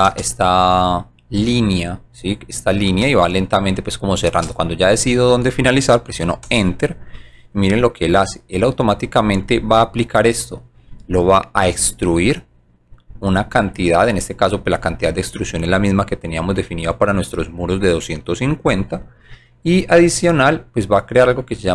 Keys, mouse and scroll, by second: 0.1 space, 2.9 space, 6.5 Return.